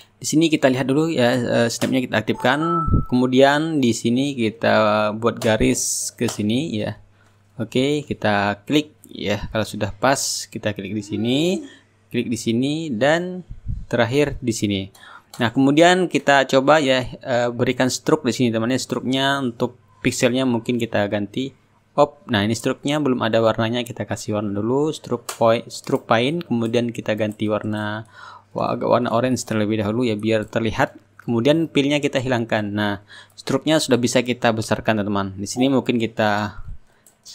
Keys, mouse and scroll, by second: 1.2 click, 4.4 click, 9.4 click, 11.3 click, 13.7-15.9 drag, 17.2-19.3 drag, 19.6 click, 22.1 click, 24.6 click, 28.3 click, 31.0 click, 34.3 click, 36.7-37.3 drag.